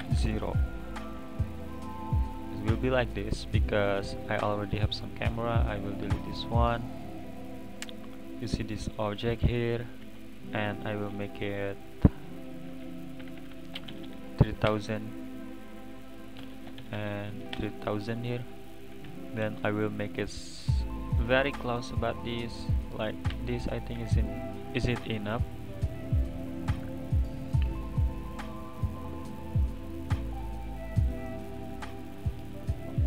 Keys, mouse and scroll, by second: 0.0 KP_0, 3.0-4.2 middle drag, 4.2 click, 5.2 x, 6.3 click, 7.3 click, 9.2 click, 10.0 g, 11.1 click, 11.9 click, 12.4 click, 13.4 BackSpace, 13.5 BackSpace, 14.0 0, 14.1 0, 15.7 click, 16.5 BackSpace, 16.9 0, 17.1 0, 18.6 click, 18.7 click, 19.0 n, 19.9 click, 21.0 click, 21.6-21.9 scroll up 1, 23.3 n, 23.9 n, 24.5 click, 24.9-25.5 middle drag, 25.5 click, 26.0 click, 26.8-29.2 middle drag, 29.2 click, 29.8-30.4 middle drag, 30.4 click, 30.8-33.0 middle drag.